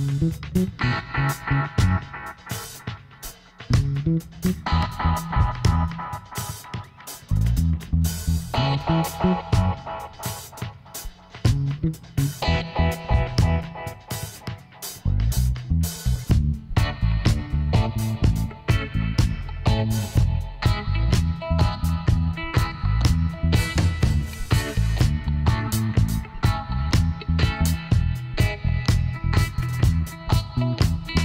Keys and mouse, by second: 3.3 middle click, 4.7 click, 5.2 Tab, 6.3 click, 8.1 l, 9.0 p, 11.1-12.9 drag, 14.4-17.2 drag, 19.0-20.5 middle drag, 20.5-22.4 drag, 26.2 Tab, 26.7-30.4 middle drag, 27.1 Tab, 29.9 Tab.